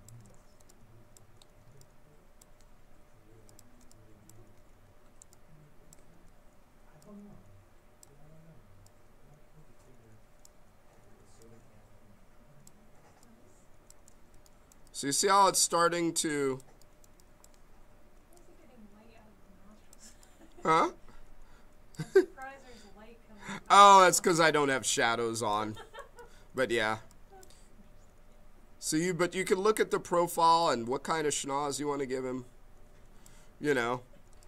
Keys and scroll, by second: 5.1 b.